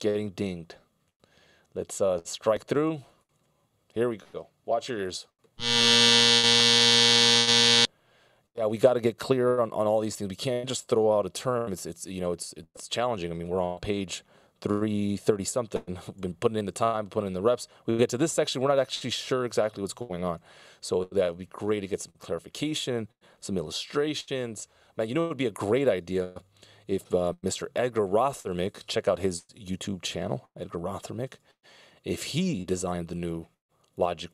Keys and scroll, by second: 11.1 super+s, 16.4 super+s, 20.7 super+s, 24.8 super+s.